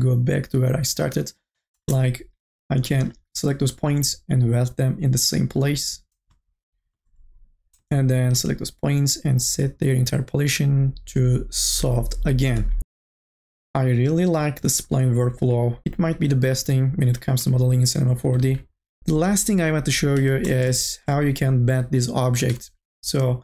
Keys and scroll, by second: 1.8 space, 19.9 4, 20.2 t.